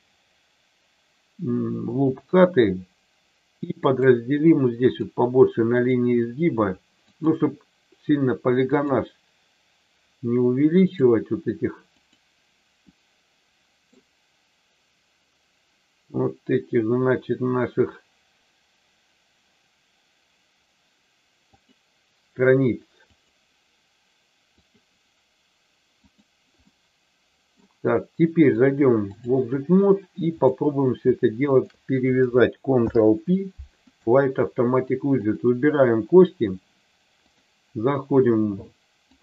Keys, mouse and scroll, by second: 1.9 click, 3.9 click, 4.9 click, 7.1 click, 8.7 click, 10.9 click, 12.0 click, 12.9-14.0 middle drag, 21.5 click, 24.6 click, 26.8 middle click, 28.6 click, 30.4 click, 31.5 shift+click, 32.7 ctrl+p, 36.1 click, 37.1-39.2 drag.